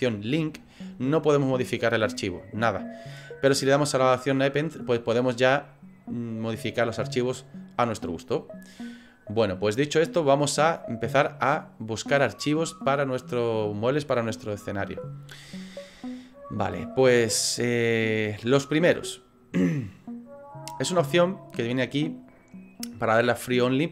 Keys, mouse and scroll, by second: 4.5 click, 23.7 click.